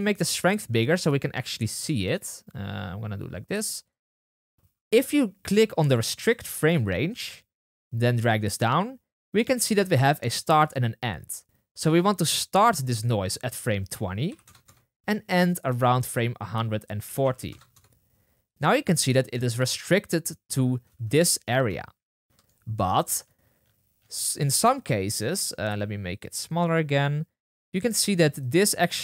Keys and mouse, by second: 6.2-8.1 middle drag, 8.1-22.3 drag, 20.8 space, 21.4 space, 22.3-23.6 shift+middle drag, 23.6-24.1 drag.